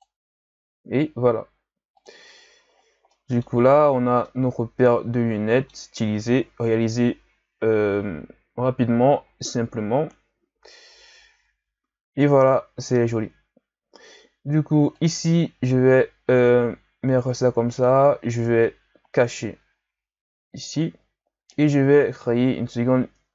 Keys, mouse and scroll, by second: 1.9 click, 2.4 a, 2.7-3.1 scroll down 1, 3.1-3.8 middle drag, 3.8-4.2 ctrl+scroll down 3, 4.2-6.7 middle drag, 6.7 KP_1, 8.6 KP_3, 9.2-10.9 scroll up 4, 10.9 KP_1, 14.9 click, 17.7 click, 20.7 click, 21.5-23.3 right drag.